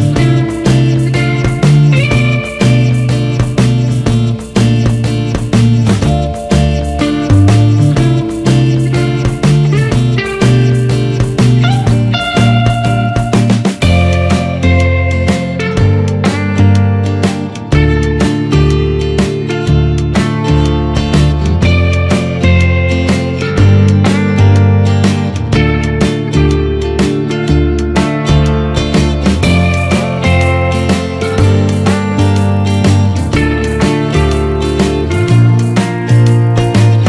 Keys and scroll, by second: 0.7 ctrl+-, 2.1 ctrl+0, 10.4 ctrl+-, 15.5 ctrl+=, 28.4 Escape.